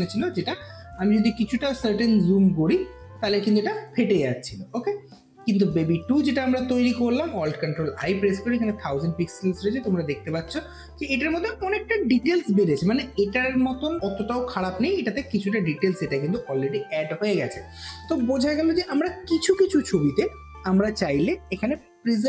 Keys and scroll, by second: 7.6 ctrl+alt+i.